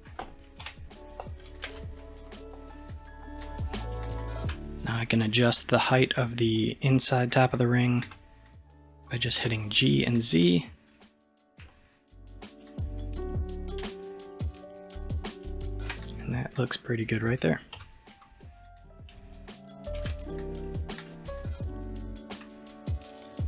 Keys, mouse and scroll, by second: 0.7 KP_1, 1.7 alt+z, 3.4-4.1 scroll up 1, 4.1-7.2 shift+middle drag, 8.1 g, 17.8 n, 18.4-20.0 middle drag, 20.0 alt+z, 20.2 click, 20.7-21.1 scroll down 4, 21.1-23.4 middle drag.